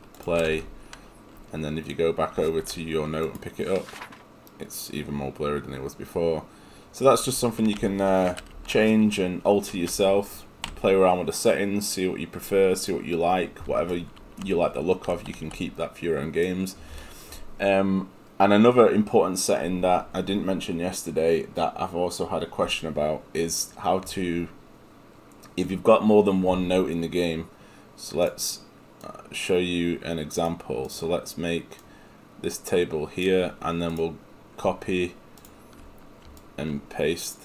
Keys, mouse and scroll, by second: 10.7 Escape.